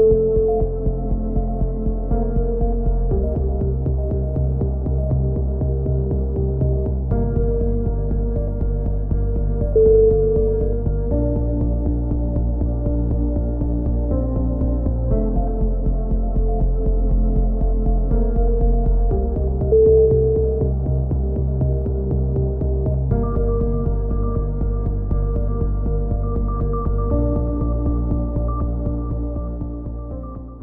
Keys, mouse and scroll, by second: 2.0 middle click, 2.7-3.8 drag, 3.8 right click, 4.2 ctrl+l, 4.9 click, 5.7-6.9 middle drag, 5.7 a, 8.6 middle click, 8.7-11.4 right drag, 9.3 shift+q, 9.7 a, 11.5 f, 11.9 a, 12.1 Tab, 12.7 click, 13.8 KP_3, 14.5 click, 16.3 click, 16.5 middle click, 16.6 click, 19.0-20.1 middle drag, 20.1 z, 21.4-27.4 middle drag, 27.8-29.4 middle drag.